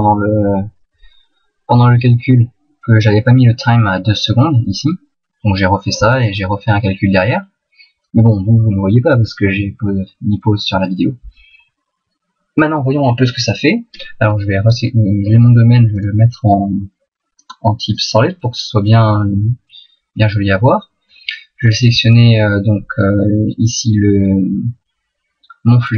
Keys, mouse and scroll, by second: 7.2 middle click, 14.2 right click, 15.9 click, 17.4 click, 19.1 middle click, 21.7 right click.